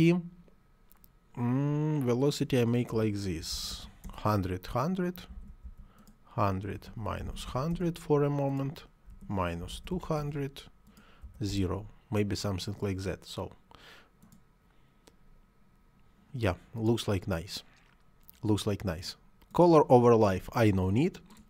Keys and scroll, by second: 2.7 -, 3.2 1, 3.3 0, 3.8 Return, 5.1 1, 5.2 0, 6.6 -, 7.0 1, 7.5 Return, 8.9 -, 9.4 2, 9.5 0, 10.0 Return, 11.0 0, 11.3 Return, 20.2 Delete.